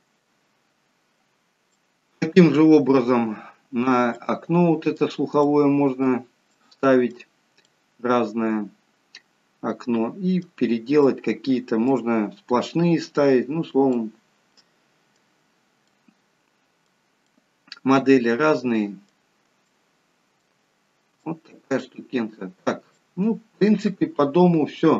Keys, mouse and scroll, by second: 1.8 shift+middle click, 4.1 middle click, 5.4 scroll up 1, 5.6 middle click, 6.6 middle click, 11.0 middle click, 12.7-13.3 scroll down 1, 13.3-14.0 scroll up 1, 14.0 middle click, 14.0-15.7 scroll up 1, 16.0 middle click, 19.7 shift+middle click, 20.2 shift+middle click, 20.7-21.3 scroll down 2, 21.3 shift+middle click, 22.0-22.9 scroll down 2, 23.0 shift+middle click.